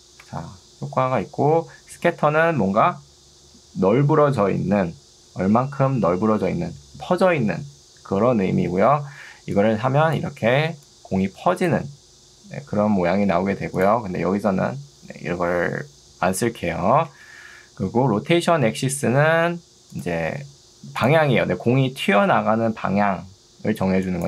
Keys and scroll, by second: 0.3 Escape, 10.7 ctrl+2, 13.3 Escape, 16.7 0, 17.1 Return.